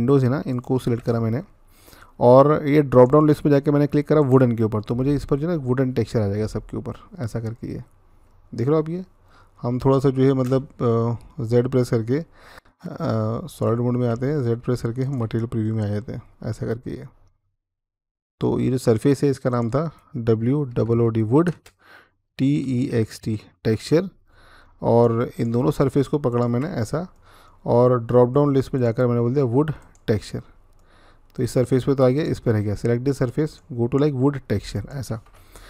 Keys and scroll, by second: 1.2 typing, 11.4-13.4 z, 13.9-15.0 z, 20.1-20.9 typing, 22.1-23.0 typing, 23.3 Return.